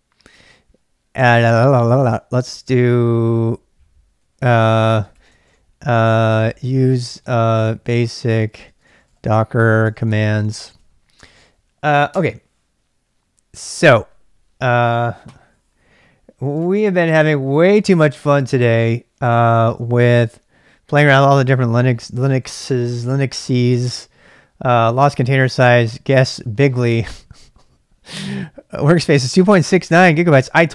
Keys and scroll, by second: 4.2-12.6 typing, 16.0 typing.